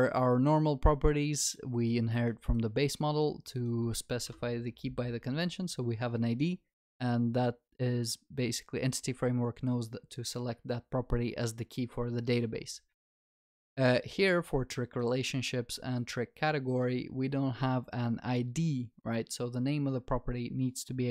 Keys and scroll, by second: 4.3 ctrl+b.